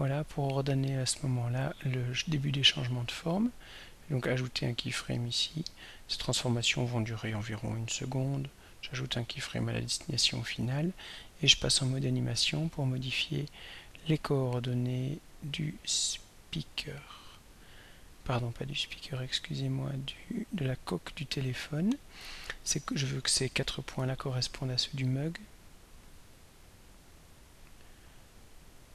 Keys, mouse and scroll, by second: 4.2 click, 5.4 click, 7.7 click, 9.1 click, 10.8 click, 12.7 click, 13.6 click, 16.1 click, 20.3 click, 24.3 ctrl+middle click, 24.3-24.7 ctrl+scroll up 1, 24.8 ctrl+middle click, 24.8-25.2 ctrl+scroll up 1, 27.6-28.9 drag.